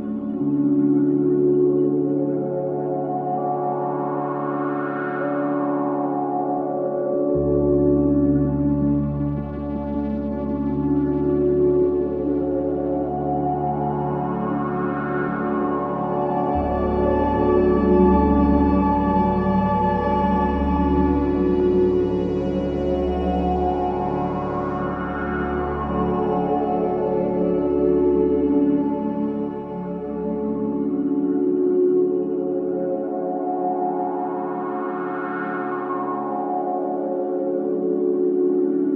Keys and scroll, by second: 19.1 ctrl+z, 21.8 ctrl+BackSpace.